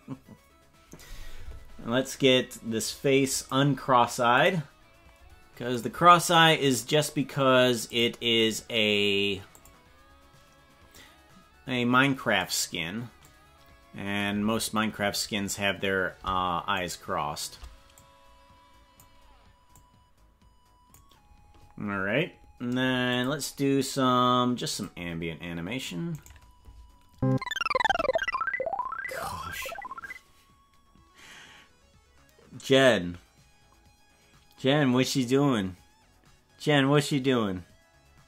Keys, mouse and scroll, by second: 3.3 click, 4.3 click, 6.2 right click, 7.9-10.1 drag, 10.9-12.3 drag, 13.3-14.5 drag, 17.2 shift+right click, 18.0 click, 19.7-20.9 drag, 23.1 click, 24.7 click, 26.3 right click, 27.8 a.